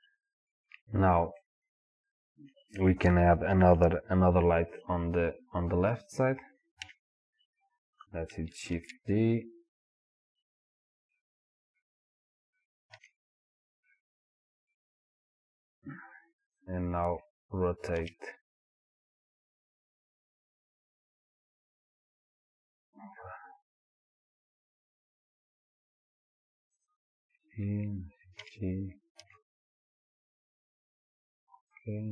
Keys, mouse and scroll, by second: 1.4-18.0 middle drag, 6.8 KP_7, 8.8 shift+d, 18.0 r, 26.9 click, 28.5 g.